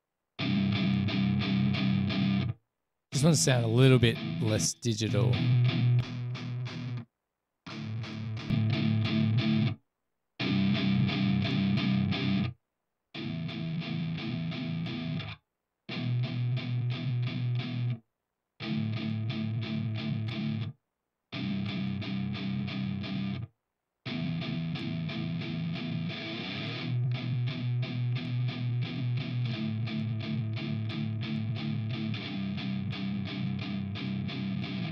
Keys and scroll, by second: 4.8 space, 5.2 space, 15.1 super+=, 22.6-23.3 typing, 25.6-28.9 typing.